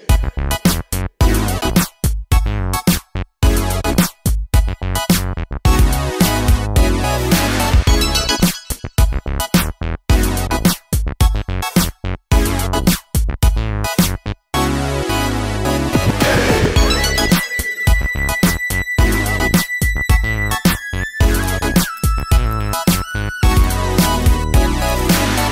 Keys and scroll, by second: 0.3 super+g, 1.0 super+c.